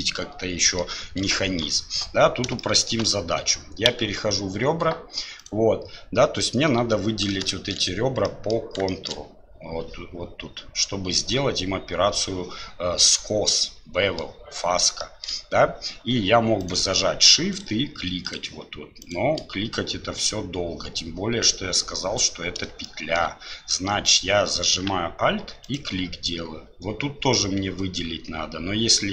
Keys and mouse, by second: 1.4 shift+middle click, 2.7 shift+middle click, 3.9 2, 7.5 shift+click, 8.2 middle click, 8.9 shift+click, 13.6 click, 15.0 shift+click, 22.8 shift+click.